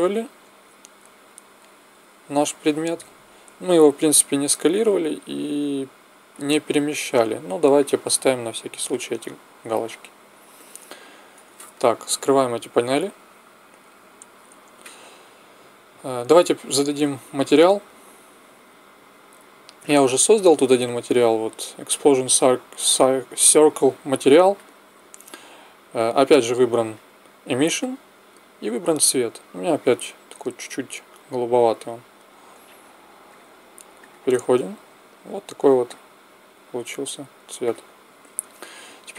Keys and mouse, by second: 8.0-10.8 drag, 12.2 n, 13.8 t, 16.7-21.7 drag, 26.8-30.4 drag, 30.4-32.0 middle drag, 33.2-35.2 drag, 36.0-38.7 drag.